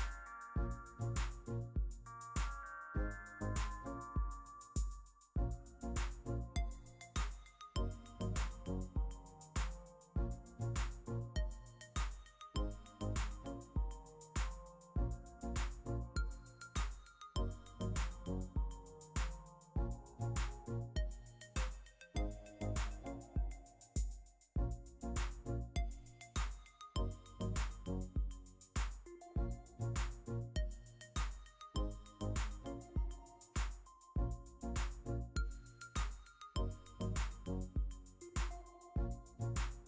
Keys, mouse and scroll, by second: 32.8 1, 34.3 5, 34.6 Return.